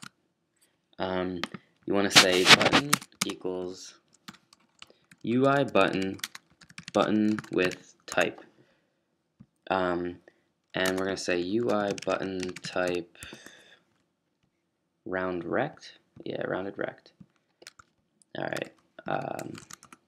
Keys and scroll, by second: 0.0-0.4 typing, 1.8-8.8 typing, 10.0-13.3 typing, 13.4 Escape, 13.9 Down, 19.6 ctrl+super+s, 19.6 typing.